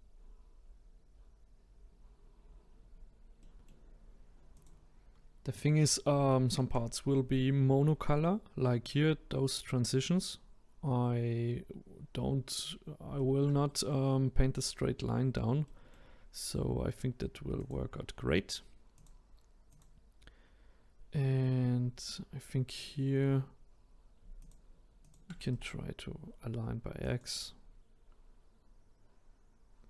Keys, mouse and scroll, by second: 3.4-4.5 middle drag, 4.5 click, 6.2-7.0 shift+middle drag, 7.0-10.0 scroll up 1, 13.1-17.5 shift+middle drag, 17.5 click, 18.9 click, 19.7 click, 22.0-22.7 scroll up 1, 22.7-24.4 scroll up 4, 24.4 shift+click, 25.0 shift+click, 25.5-28.5 right drag.